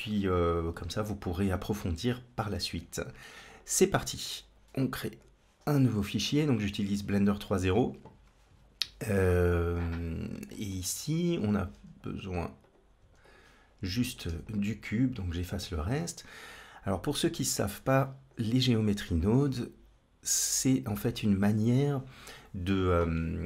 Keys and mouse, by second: 3.4-6.3 drag, 9.2 click, 10.3 shift+middle click, 11.2 click, 11.5 x, 12.8 x, 13.9 click, 17.5 click, 19.1-20.7 drag, 22.1 click.